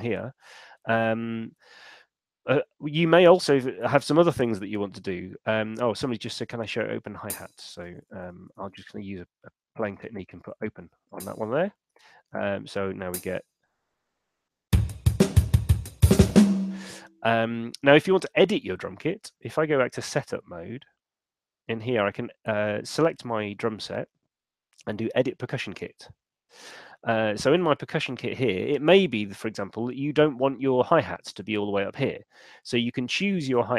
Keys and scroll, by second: 7.7-8.8 typing, 13.5 p, 16.6 space.